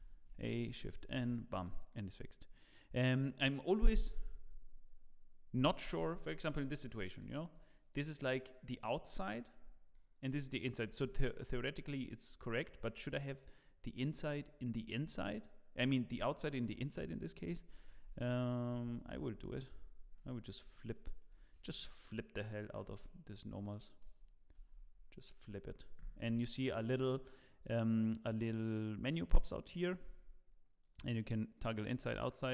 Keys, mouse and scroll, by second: 0.6 shift+n, 1.1 Tab, 1.5-1.9 scroll down 2, 1.9 middle click, 6.5-6.9 scroll down 5, 6.9 middle click, 7.5 click, 9.7 click, 12.8 scroll down 1, 13.0 middle click, 14.8 scroll down 2, 15.4 middle click, 16.2 middle click, 17.1 middle click, 17.9 Tab, 18.7 a, 19.3 shift+n, 19.9 Tab, 21.4 shift+n, 22.5 middle click, 22.9 Tab, 24.5 shift+n, 29.2 click, 30.0-32.5 click.